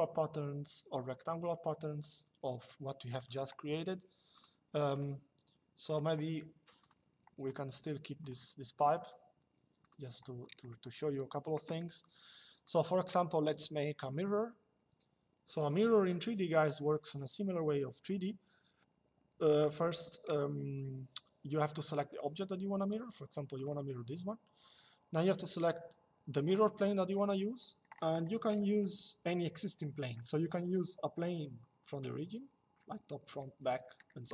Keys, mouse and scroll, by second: 2.9 click, 4.1 click, 9.5 click, 12.3 click, 15.5 click, 16.9 click, 23.3 click, 26.3 click, 28.6 shift+middle click.